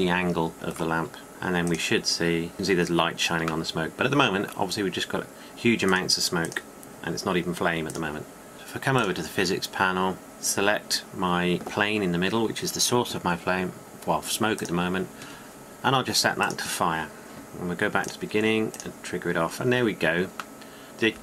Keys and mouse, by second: 1.3-3.2 drag, 6.8-11.0 drag, 12.9-15.6 middle drag, 15.6-20.3 drag, 20.3-21.2 middle drag.